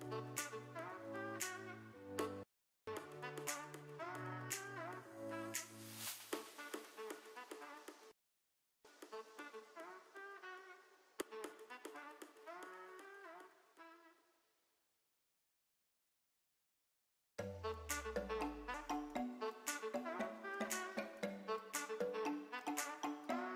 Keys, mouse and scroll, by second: 0.3 click, 0.7-2.5 drag, 2.5 s, 2.5 g, 4.2 s, 4.2 z, 8.1 s, 8.1 z, 11.4 g, 12.8 z, 14.0 z, 14.0 s, 14.9 click, 15.4 g, 17.5-18.8 middle drag, 20.2 s, 20.2 y, 20.6 x, 23.4 s.